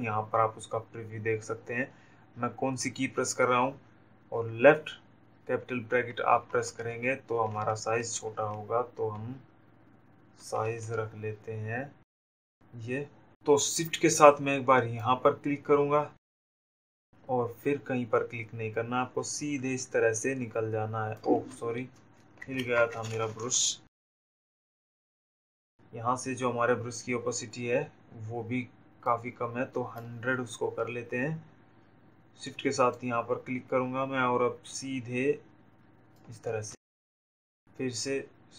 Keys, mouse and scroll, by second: 7.2 typing, 9.3 ], 12.2 ], 16.5-22.6 shift+drag, 22.6 ctrl+alt+z, 29.4 click, 33.0 shift+click.